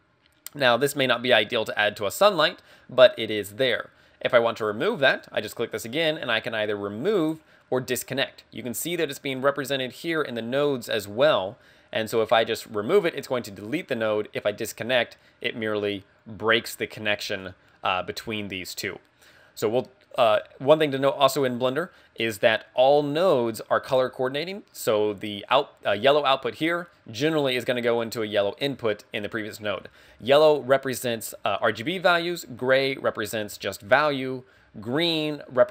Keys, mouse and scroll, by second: 5.2 click, 10.4-10.9 scroll up 4, 10.9 middle click, 12.3 click, 17.4 click, 19.6-20.3 scroll up 3, 20.3 middle click, 20.9 scroll down 2.